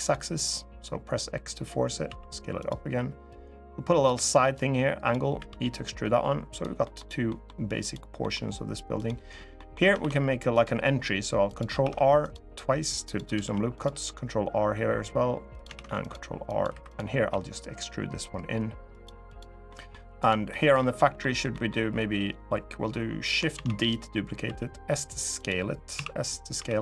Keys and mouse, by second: 0.3 click, 1.8 s, 2.3 click, 3.0 click, 4.3 click, 5.1 e, 6.2 click, 6.6 middle click, 7.0 middle click, 7.5 click, 7.9 middle click, 8.7 click, 9.3 click, 9.7 ctrl+r, 11.2 click, 11.5 ctrl+r, 12.8 click, 13.2 ctrl+r, 15.2 click, 15.5 ctrl+r, 16.2 click, 16.4 3, 17.0 e, 18.6 click, 19.4 middle click, 20.2 middle click, 20.7 middle click, 21.2 middle click, 23.3 shift+d, 24.2 s, 25.1 click, 25.7 s, 26.3 y.